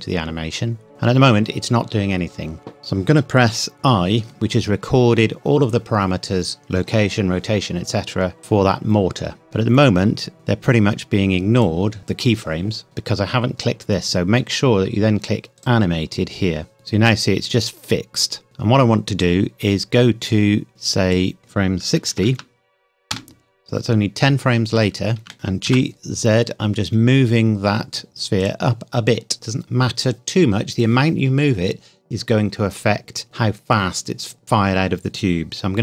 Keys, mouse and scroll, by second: 0.9-2.2 scroll up 1, 3.7 i, 9.4 space, 11.6 click, 15.6 click, 16.7 space, 19.2 click, 22.2 KP_6, 23.1 KP_Enter, 25.7 g, 28.4 click.